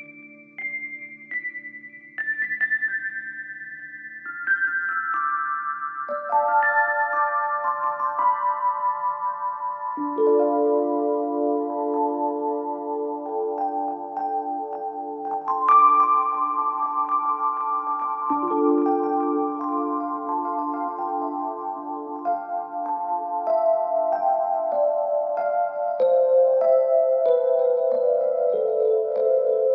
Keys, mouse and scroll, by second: 0.1-1.2 scroll down 4, 1.2 shift+d, 3.4-4.2 scroll down 2, 4.2 click, 4.5-4.9 scroll up 1, 5.8 shift+d, 7.4 r, 9.0-9.6 scroll up 2, 9.6 g, 12.0 click, 13.2 click, 13.9 click, 14.1-14.4 scroll up 1, 14.4-15.1 scroll down 8, 15.1 scroll up 2, 15.6 click, 16.3 r, 17.1 click, 17.4 r, 18.4 click, 18.6 scroll down 4, 20.7 click, 21.2-21.5 scroll down 2, 22.1 click, 22.5 click, 22.7 a, 25.2 shift+d.